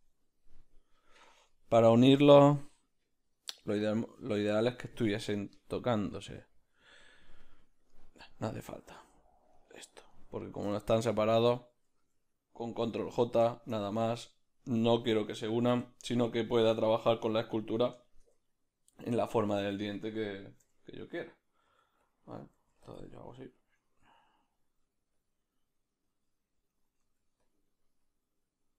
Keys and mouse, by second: 1.3-8.3 middle drag, 8.3 click, 9.1-10.7 shift+right drag, 10.7-14.6 middle drag, 12.8 ctrl+j, 16.4 Tab, 16.4 b, 18.0 shift+middle click, 18.4 ctrl+middle click, 21.7 f, 23.0 ctrl+middle click, 23.6-28.7 drag, 27.0 f.